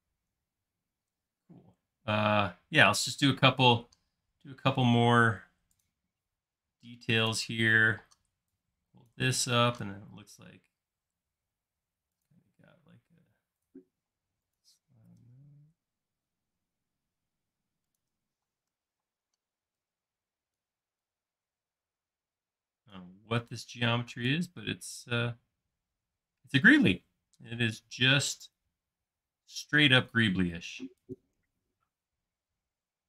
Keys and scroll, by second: 0.4 typing, 3.5 space, 4.2 l, 5.0 r, 7.7-10.1 typing, 14.1 m, 18.5 space, 19.0 p, 21.3 typing, 23.4 space, 29.9 m.